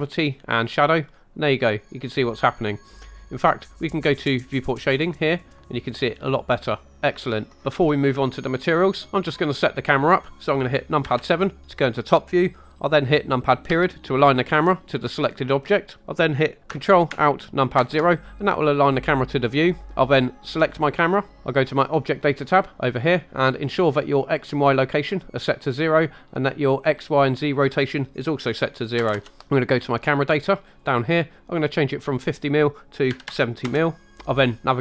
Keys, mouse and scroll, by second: 1.1-3.0 middle drag, 4.8 click, 5.6-7.6 middle drag, 11.0 KP_7, 13.7 KP_Decimal, 17.8 ctrl+alt+KP_0, 20.6 click, 26.8-29.1 drag, 30.8-33.8 drag.